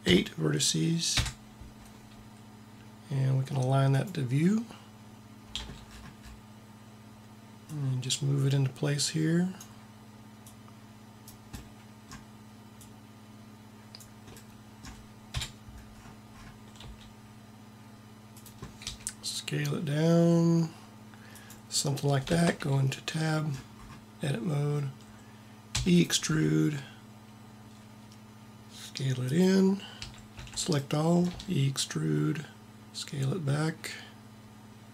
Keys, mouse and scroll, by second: 5.4 t, 7.6 click, 8.4-9.4 right drag, 10.4 right click, 10.8 click, 11.7 middle click, 12.8 click, 15.2 KP_1, 15.4 KP_1, 16.7 g, 18.7 s, 22.2 Tab, 25.6 e, 25.9 click, 26.3 s, 29.9 a, 30.4 a, 31.3 e.